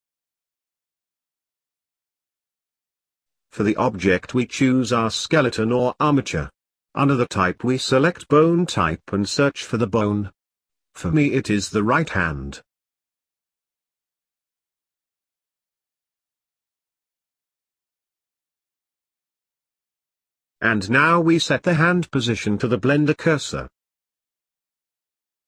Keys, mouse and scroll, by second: 9.0-18.6 drag, 19.0-19.3 scroll down 1, 19.3-19.7 scroll up 1, 19.7-25.0 middle drag, 25.0 shift+s.